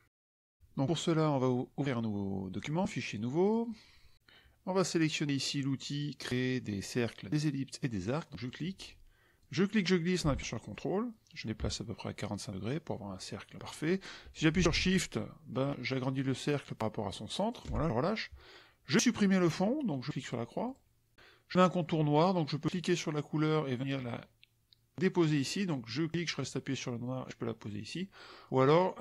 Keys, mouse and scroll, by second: 0.0 KP_Subtract, 2.7 click, 3.4 click, 8.4 click, 9.4-17.7 drag, 20.6 click, 22.7-25.4 drag, 26.3-28.2 drag.